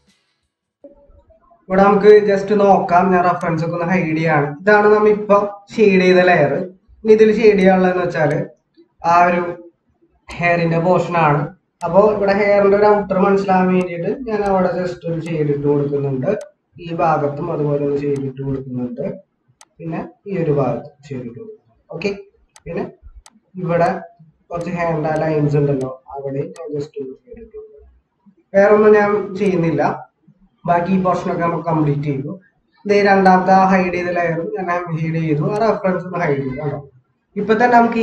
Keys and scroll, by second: 0.4 ctrl+=, 2.2 ctrl+-, 2.3 ctrl+-, 9.3 ctrl+=, 30.4 ctrl+-, 36.9 ctrl+-.